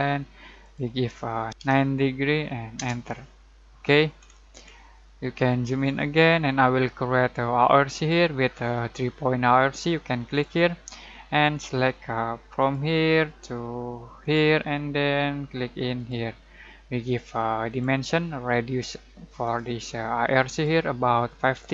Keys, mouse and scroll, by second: 1.5 BackSpace, 1.6 9, 2.7 Return, 3.7-4.1 scroll down 1, 4.1 scroll up 1, 7.9 click, 10.3 click, 12.6 click, 21.5-21.7 typing.